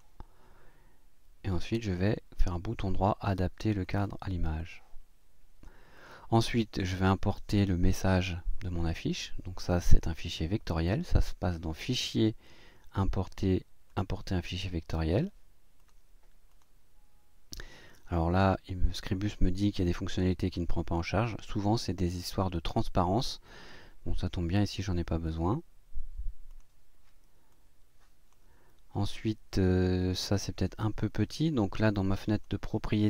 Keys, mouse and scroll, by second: 2.0 click, 3.8 click, 4.6-5.8 drag, 5.9 click, 9.6 click, 13.9 click, 15.8 click, 16.5 click, 25.2 click, 26.5 click, 27.5 click, 31.8 click.